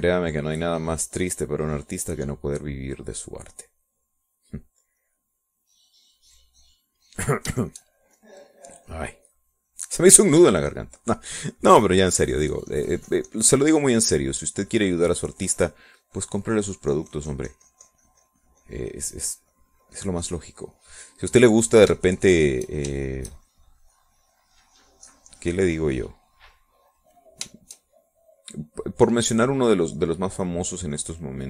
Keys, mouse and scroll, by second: 8.9 shift+click, 9.3-21.5 shift+drag, 21.7 middle click, 22.4 click, 23.3 shift+click, 24.3 shift+click, 24.8-26.5 shift+drag, 26.8-31.0 drag, 31.3-31.4 drag.